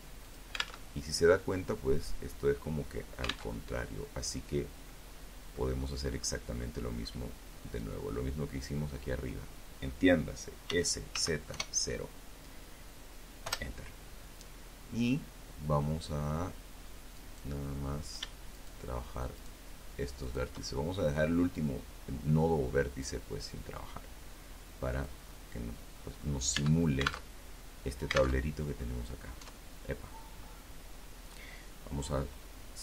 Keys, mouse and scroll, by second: 1.7 alt+Tab, 2.5-3.0 scroll down 2, 3.0-4.1 middle drag, 4.3-4.7 scroll up 2, 4.7 middle click, 5.9 click, 8.8 s, 9.3 z, 9.7 KP_0, 11.6 Return, 15.3 right click, 16.7 shift+right click, 17.5 shift+right click, 18.4 shift+right click, 18.8 shift+middle click, 21.1-23.4 drag, 23.5-24.5 middle drag, 24.7 Tab, 26.5 alt+Tab, 26.9 middle click, 27.5 Tab, 27.5 click.